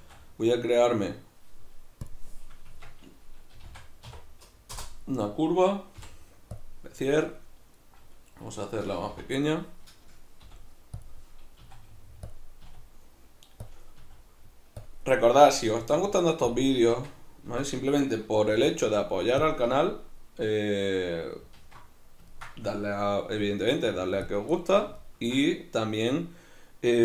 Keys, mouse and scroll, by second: 0.0 shift+a, 2.7 Tab, 3.6 g, 4.8 Return, 9.2 ., 11.6 s, 12.4 click, 12.7 s, 13.7 click, 14.0 s, 14.9 click, 15.8 s, 16.6 click, 16.9 Tab, 18.5 g, 19.5 click, 21.6 alt+q, 22.3-24.3 ctrl+middle drag, 23.4 g, 24.3 click, 24.5-27.0 shift+middle drag.